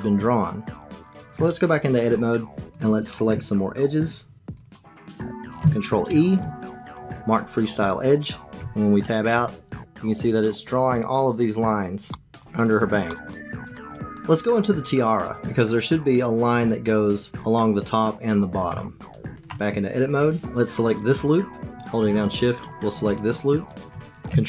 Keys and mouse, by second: 1.3 Tab, 2.7 click, 2.9 click, 3.8 shift+click, 3.9 shift+click, 4.5 shift+click, 5.0 shift+click, 6.0 ctrl+e, 8.5 Tab, 12.1 click, 13.0 shift+click, 13.3 click, 13.7 shift+click, 18.6 Tab, 20.9 click, 21.1 click, 23.1 shift+click.